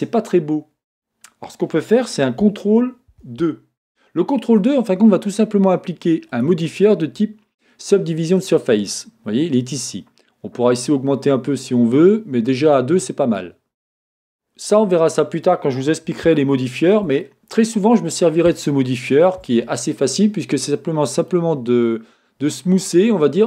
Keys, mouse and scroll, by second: 1.6-3.5 scroll up 2, 3.5 ctrl+2, 6.5 click, 10.7-12.3 drag, 13.3 click, 14.2-23.4 middle drag.